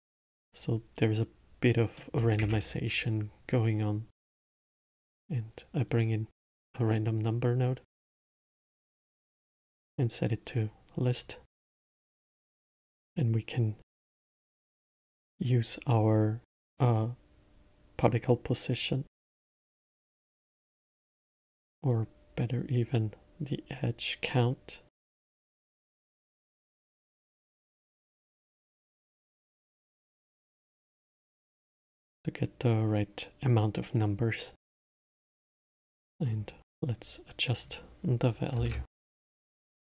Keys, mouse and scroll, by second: 2.3 middle click, 2.7 shift+a, 10.8 click, 15.0 click, 23.0 click, 27.1 click, 28.8-30.0 drag, 31.4-34.4 middle drag, 34.7 click, 36.5 middle click, 37.2 scroll up 1, 37.6-40.0 drag.